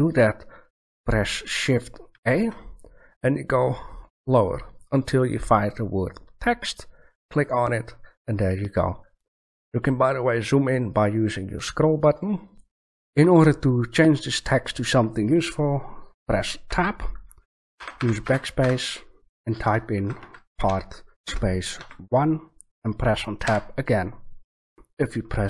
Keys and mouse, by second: 2.1 shift+a, 11.5 middle click, 11.9-13.2 middle drag, 16.7 Tab, 17.7-18.6 typing, 19.9-21.7 typing, 23.4 Tab, 24.7 Tab.